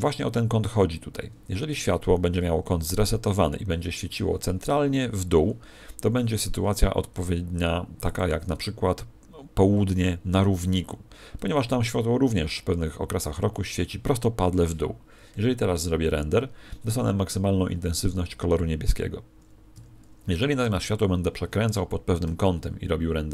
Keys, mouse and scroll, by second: 2.5 alt+r, 8.1 click, 11.5 n, 19.7 Escape, 20.6 r, 21.9 click.